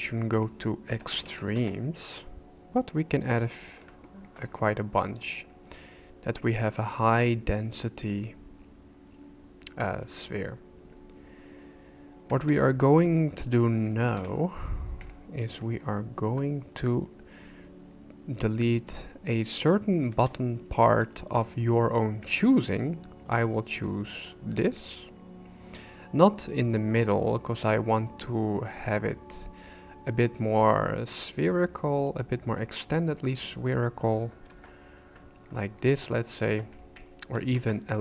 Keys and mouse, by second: 0.3-2.9 drag, 4.0 shift+middle click, 12.4 Tab, 13.2 shift+middle click, 14.1 alt+a, 15.8 shift+click, 20.1 b, 34.5 shift+c, 35.4 shift+click, 37.3 ctrl+z.